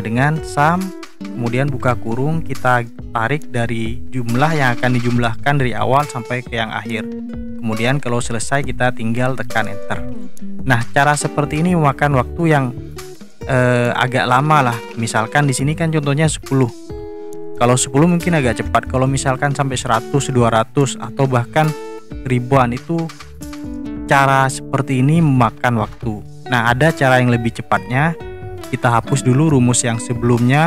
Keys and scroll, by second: 0.0-1.8 typing, 9.6 Return.